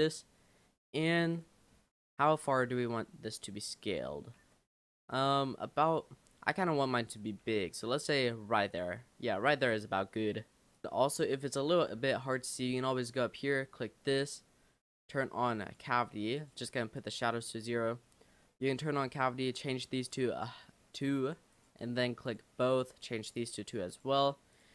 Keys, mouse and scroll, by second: 0.3 scroll up 2, 1.3 click, 1.7-2.1 scroll up 2, 2.1 shift+middle click, 2.7 s, 5.0 g, 6.1 s, 7.4 g, 10.8 click, 10.9 Tab, 13.6-16.7 drag, 24.5 click.